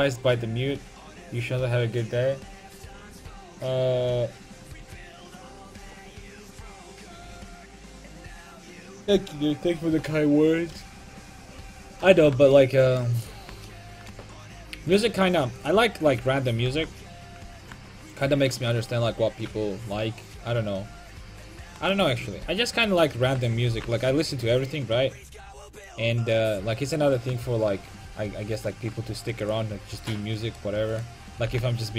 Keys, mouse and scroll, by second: 16.2 right click, 16.7 g, 22.0-23.8 right drag, 23.8 g, 30.5-31.5 right drag, 31.5 g.